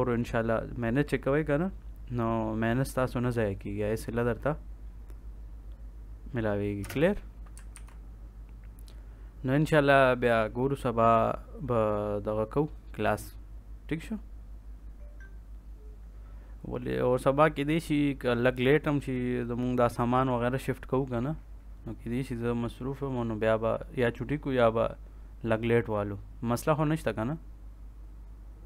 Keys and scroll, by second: 6.7 space, 7.7 ctrl+s.